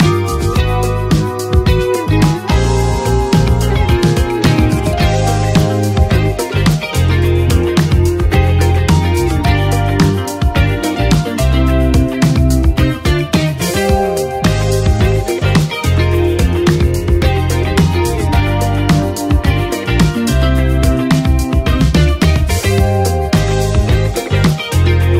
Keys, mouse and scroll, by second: 10.8 click, 10.9 click, 11.5 space, 15.4 space, 16.8-23.9 drag, 23.9 ctrl+s.